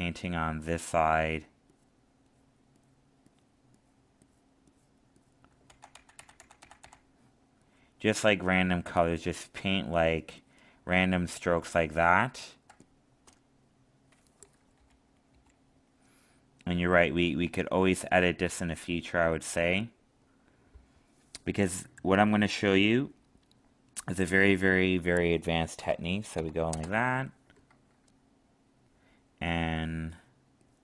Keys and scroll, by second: 5.7 ctrl+z, 11.5 alt+space.